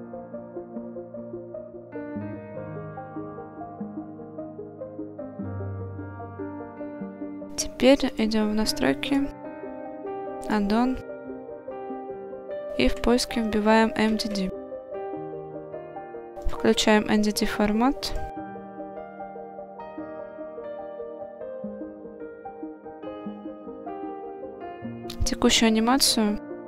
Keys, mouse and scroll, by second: 5.2 click, 6.2 click, 8.1-9.3 drag, 22.0 scroll down 2, 22.5-22.9 shift+middle drag, 23.0-23.4 scroll up 1, 23.7-24.2 shift+middle drag.